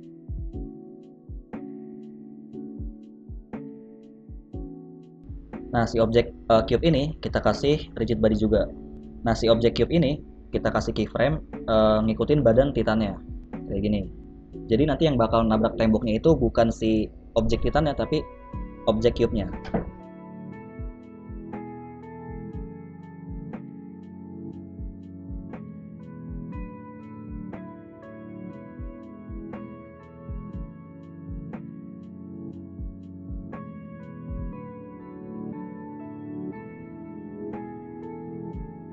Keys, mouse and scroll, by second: 0.9 click, 2.1-2.9 scroll down 2, 2.9 click, 2.9-3.2 scroll down 1, 3.2 click, 4.5 click, 5.6 click, 6.4-7.5 scroll down 5, 7.5 click, 8.7 middle click, 10.6 KP_3, 11.1 z, 12.1-13.1 scroll up 3, 13.3 i, 17.9 Right, 18.2 Right, 18.3 Right, 18.6 Right, 18.8 Right, 18.9 Right, 19.1 Right, 19.3 Right, 19.5 Right, 19.7 Right, 19.8 Right, 20.0 Right, 20.2 Right, 21.4 scroll down 2, 21.5 g, 23.8 i, 25.9-27.3 Left, 27.7 Right, 27.9 Right, 28.0 Right, 28.2 Right, 28.3 Left, 28.8 Left, 29.3 Left, 29.6 scroll up 2, 30.3 right click, 30.3-30.6 scroll up 1, 30.7 v, 32.8 Right, 33.1 Right, 33.5 Right, 33.9 Right, 34.1 Right, 34.6 Right, 34.9 Right, 35.2 Right, 36.1 Right, 36.2 Right, 36.5 Right, 36.7 Right, 37.0 Right, 38.1 z, 38.2 middle click, 38.8 scroll down 2.